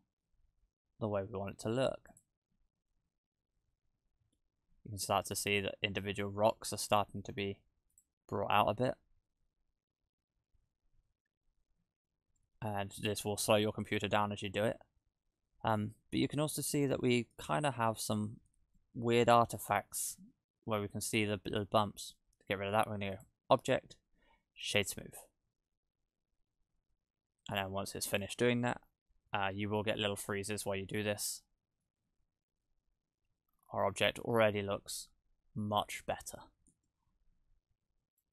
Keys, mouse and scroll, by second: 2.1 click, 4.4 middle click, 8.0 click, 12.7-13.1 scroll down 1, 13.8-14.2 scroll down 1, 14.6 scroll up 1, 15.1-15.7 scroll down 2, 16.0 scroll up 1, 16.7 shift+middle click, 17.7 shift+middle click, 18.2 scroll up 1, 18.8 shift+middle click, 23.2 click, 29.6-30.4 scroll down 2, 30.4 scroll up 1, 30.9 middle click, 32.8 KP_0, 33.5-33.9 scroll up 7, 34.4 shift+middle click, 35.1-35.8 scroll up 2, 36.2-36.5 scroll down 1.